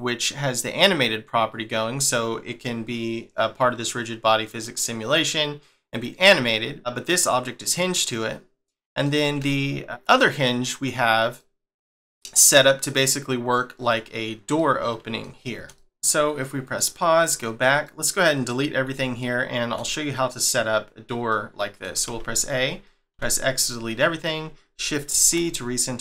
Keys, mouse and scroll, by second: 6.5 middle click, 8.7 middle click, 11.0 scroll up 1, 11.4 middle click, 13.0 middle click, 14.6 middle click, 16.6 click, 17.2 click, 17.8 middle click, 18.4 scroll down 1, 18.9 shift+middle click, 21.3 middle click, 22.1 a, 23.7-25.1 scroll down 1, 25.1 shift+c, 25.6-26.0 scroll up 1.